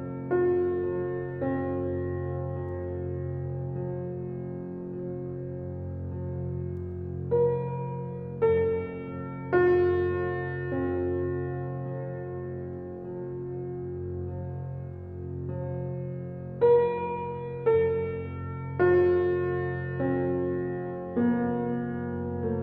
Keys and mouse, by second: 4.8 ctrl+shift+l, 5.8 Return, 7.1 alt+a, 7.6-8.6 alt+drag, 9.1 alt+click, 9.9 alt+click, 11.3 shift+s, 12.6 click, 13.9 click, 15.3 ctrl+a, 16.1 click, 17.3 ctrl+z, 19.6 alt+click, 20.2-21.5 alt+middle drag, 21.5-22.6 alt+drag.